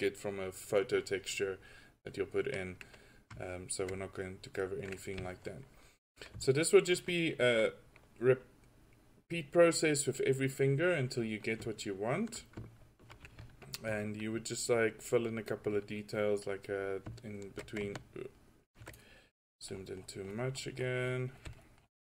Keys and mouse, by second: 14.0-15.6 drag, 15.9 drag, 15.9 right drag.